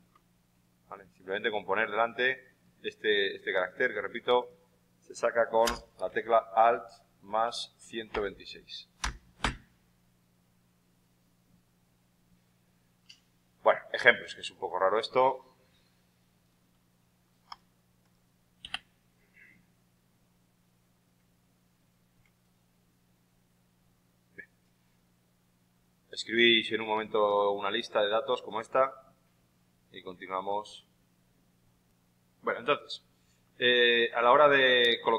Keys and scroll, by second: 6.0-9.3 typing.